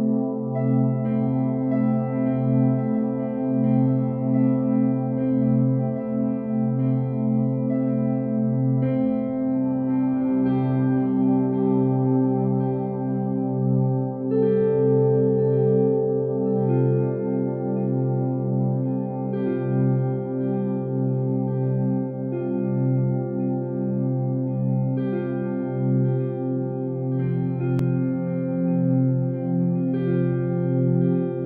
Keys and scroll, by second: 1.6 shift+F5.